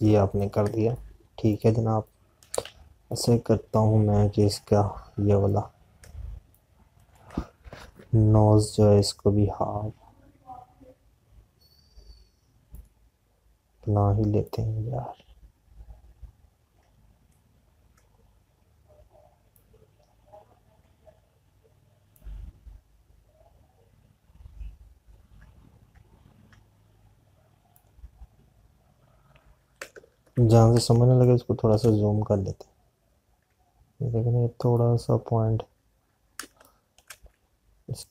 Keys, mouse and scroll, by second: 0.4 click, 7.5 space, 10.3 p, 15.3 click, 20.3 click, 25.2 alt+click, 30.4 click, 32.0 space, 36.2 alt+click.